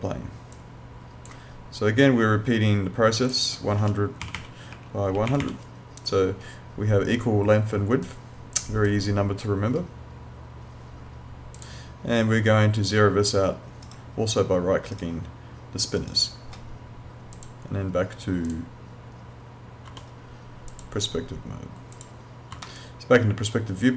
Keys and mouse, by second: 3.3 click, 3.8 1, 4.2 0, 4.7 Tab, 5.1 1, 5.3 0, 8.0 click, 11.6 click, 13.9 right click, 17.3 click, 20.7 click, 22.7 alt+middle click.